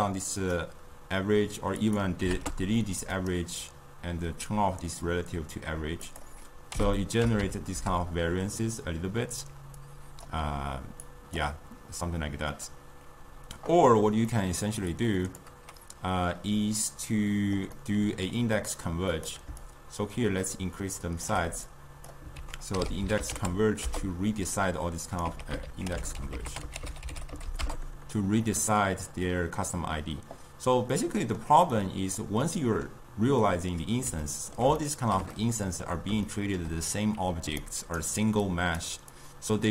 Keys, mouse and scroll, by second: 1.9-3.3 drag, 6.1-9.2 drag, 9.8-14.1 drag, 14.4-15.0 middle drag, 15.0 click, 17.8-19.2 middle drag, 19.2 click, 19.7-21.8 shift+drag, 22.5 ctrl+a, 25.3 x, 25.7 ctrl+a, 31.0-37.5 middle drag, 37.5-39.7 typing, 37.7 right click, 38.5 click, 39.2 click.